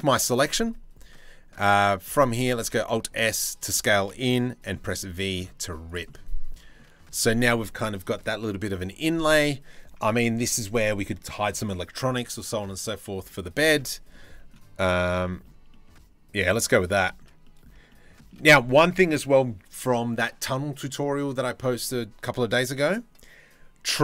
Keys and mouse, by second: 2.1 alt+s, 4.3 v, 5.1 v, 5.3 Tab, 5.7-6.4 middle drag, 13.7-16.4 shift+middle drag, 16.7-17.3 shift+middle drag.